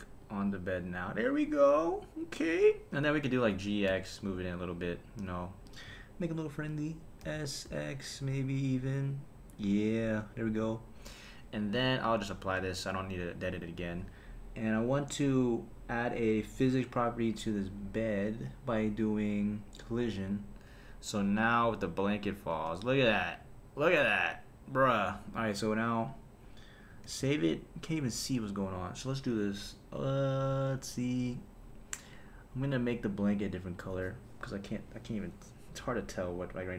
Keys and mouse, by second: 3.5 g, 3.9 x, 5.7 click, 7.2 s, 7.7 x, 9.5 click, 12.3 click, 12.6 super+a, 13.6 click, 16.3 click, 16.9 click, 17.8 click, 19.7 click, 21.2 space, 22.5 space, 26.1 click, 27.1 super+s, 32.6 click, 33.7 click, 34.5 click, 34.9-35.6 drag, 36.5 click.